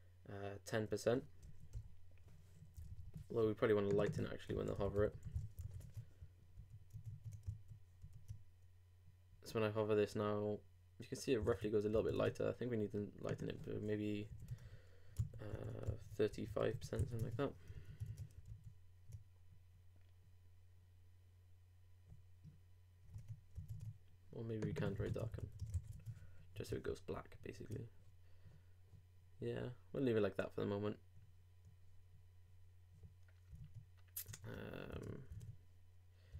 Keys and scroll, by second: 5.6 super+n, 5.8 super+Tab, 6.6 super+r, 6.9 super+Tab, 7.5 super+r, 11.5 super+Tab, 15.2 super+2, 16.3 super+BackSpace, 17.0 super+5, 17.2 super+Tab, 18.5 super+r, 23.1 super+Tab, 25.7 super+n, 25.9 super+Tab, 27.1 super+r, 33.6 super+Tab.